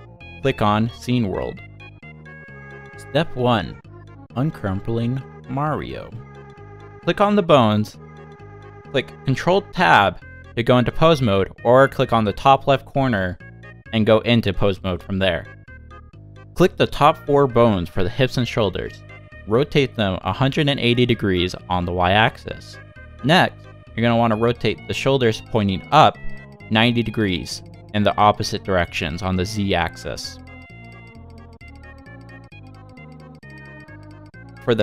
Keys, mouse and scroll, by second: 8.4 middle click, 9.7 shift+middle click, 10.2 middle click, 11.2 shift+middle click, 11.6 middle click, 13.0 click, 13.9 ctrl+Tab, 14.2-14.6 scroll up 4, 14.8 middle click, 15.8 click, 16.7 shift+click, 19.0 scroll down 1, 19.4 r, 24.0 click, 24.3 r, 28.5 click, 29.3 r, 32.2 scroll down 1, 33.0 click, 33.4 shift+middle click, 34.4 shift+click.